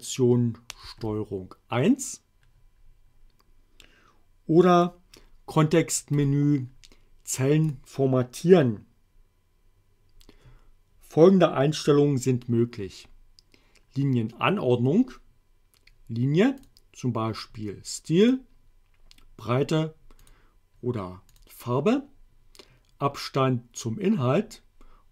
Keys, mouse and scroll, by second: 0.9 ctrl+1, 4.8 click, 6.2 right click, 7.7 click, 16.7 click, 18.3 click, 20.3 click, 21.4 click.